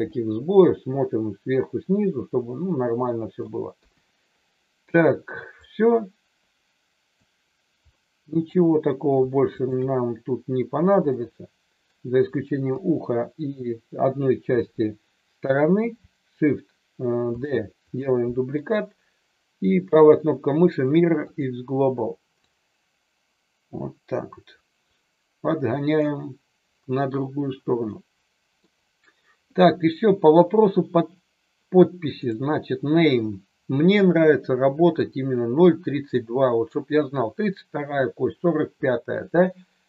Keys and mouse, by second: 0.0-3.4 middle drag, 3.8 KP_1, 5.7-7.2 drag, 7.9 middle click, 9.6 shift+click, 11.0 middle click, 12.7 KP_1, 17.3 shift+d, 17.8 click, 18.5-21.5 right drag, 22.4-25.9 drag, 27.9 middle click, 32.2 drag.